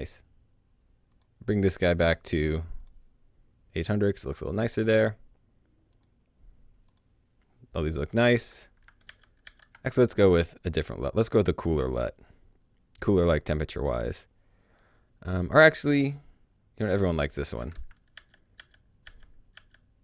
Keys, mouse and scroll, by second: 1.1 click, 2.8 click, 5.9 click, 8.8 click, 9.0 d, 9.4 d, 10.5 right click, 15.0-16.2 scroll up 1, 16.8 click, 18.1 alt+d, 18.5 alt+d, 19.0 alt+d, 19.5 alt+d.